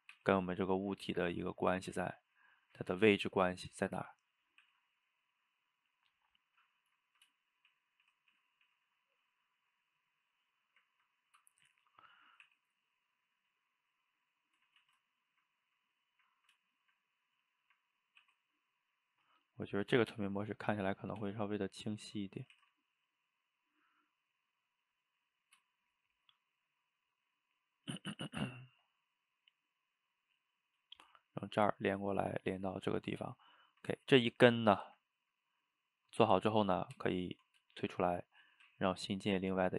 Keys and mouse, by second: 0.0 click, 0.2 e, 1.7 click, 2.0 g, 2.8 click, 3.0 g, 4.0 click, 4.6 e, 6.0-7.7 middle drag, 7.7 shift+z, 8.1 shift+z, 9.0 click, 9.4-12.5 middle drag, 12.5 e, 13.5-14.8 middle drag, 14.8 ctrl+z, 15.0-17.3 middle drag, 17.3 click, 17.6 shift+middle click, 18.2 e, 20.0 click, 20.2 g, 21.0 click, 21.2 g, 22.2 middle click, 22.6 shift+z, 22.9-25.9 middle drag, 29.9-36.9 middle drag, 36.9 Tab, 37.7-38.6 shift+middle drag, 38.6 shift+a.